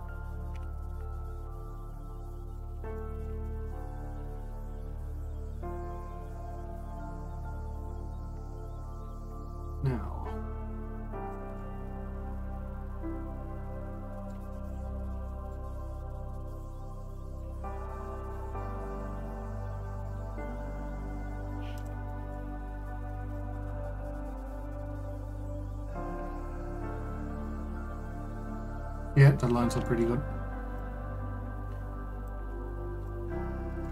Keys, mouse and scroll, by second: 0.3 click, 1.2 KP_Decimal, 1.8-2.1 scroll down 1, 2.4-5.3 middle drag, 5.3 click, 5.8 shift+click, 6.3 shift+click, 8.5-10.1 drag, 12.3-15.3 middle drag, 15.3 click, 15.6-16.0 scroll down 1, 16.0-17.2 middle drag, 17.2 click, 17.7-18.7 middle drag, 18.7-19.0 scroll down 1, 19.0 middle click, 19.7 shift+d, 24.0 click, 26.8 KP_Decimal, 27.4-27.8 scroll down 2, 27.8-28.5 middle drag, 28.5-29.2 scroll up 2, 29.2-30.2 middle drag, 30.2 scroll down 2, 30.5-31.4 shift+middle drag, 31.4 click, 33.2-33.7 scroll down 2, 33.7-33.9 middle drag.